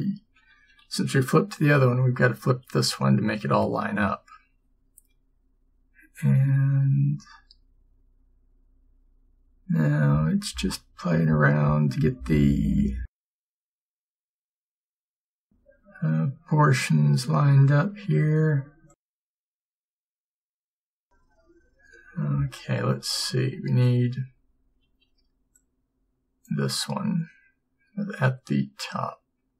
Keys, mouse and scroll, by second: 0.9 ctrl+m, 5.7 g, 22.9 a.